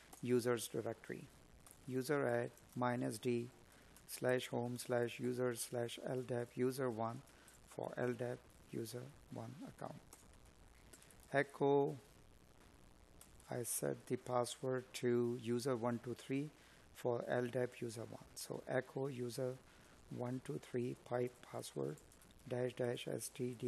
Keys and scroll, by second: 2.0 space, 6.3 space, 13.7 space, 15.6 space, 16.9 space, 19.0 space.